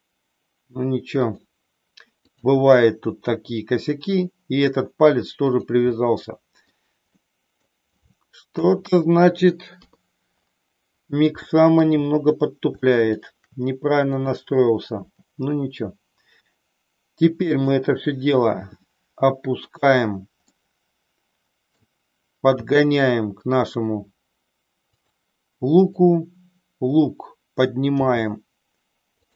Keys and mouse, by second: 2.2 click, 3.3 r, 5.5 click, 5.9 middle click, 7.0 middle click, 8.5 KP_1, 9.6 KP_3, 11.4 shift+middle click, 12.9 shift+middle click, 15.2 g, 17.6 click, 18.4 r, 19.8 click, 20.5-21.9 middle drag, 22.5 g, 25.8 click, 28.0 g.